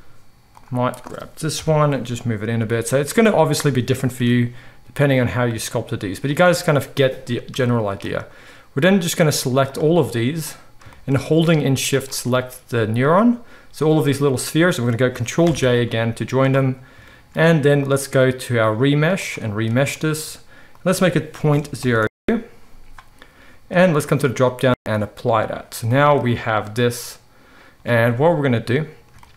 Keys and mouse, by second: 1.5 KP_7, 2.5 g, 4.1 g, 5.4 click, 5.8-10.1 middle drag, 5.8 g, 9.4 z, 10.1-12.0 drag, 12.0-17.9 shift+middle drag, 15.4 ctrl+j, 16.0 z, 17.9-29.3 drag.